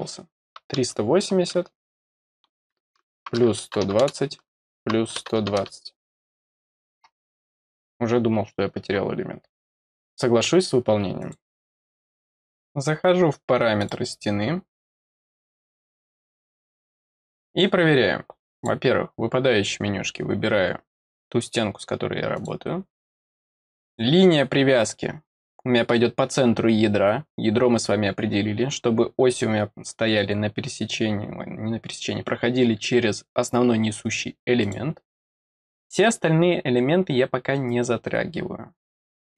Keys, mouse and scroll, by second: 5.9 click, 11.1 click, 13.7 click, 15.0 click, 18.5 click, 22.3 click, 23.8 click, 34.6 click, 36.0 scroll down 1.